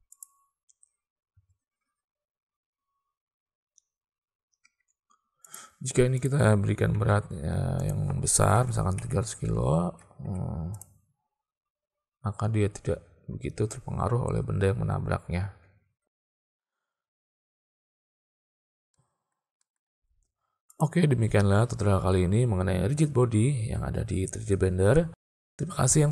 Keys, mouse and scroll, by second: 0.2 click, 1.4 space, 4.7 space, 6.3 click, 7.8-9.7 drag, 9.2 0, 10.3 alt+a, 10.9 click, 16.2 space, 17.0 space, 19.0 middle click, 19.7 shift+click, 20.7 click.